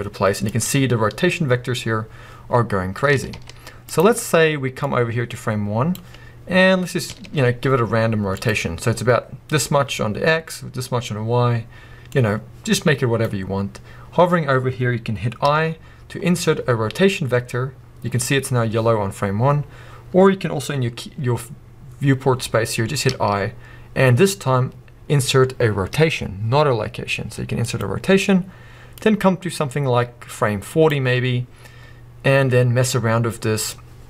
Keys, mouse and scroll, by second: 2.9 r, 4.0 right click, 4.8-8.4 drag, 6.8 scroll down 1, 7.1 r, 12.1-34.0 drag.